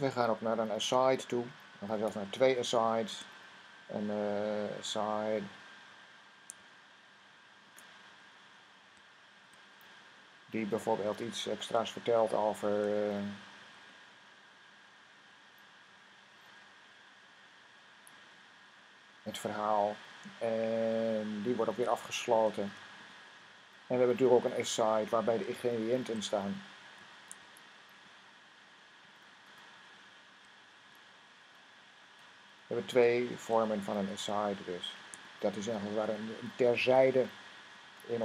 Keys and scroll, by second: 3.0 typing, 4.8 typing, 6.4 typing, 9.0-9.8 typing, 13.0 typing, 22.2-22.9 typing, 25.8 typing, 26.9-27.9 typing, 30.5-31.2 typing, 33.0-33.7 typing, 35.0 typing, 36.4 typing.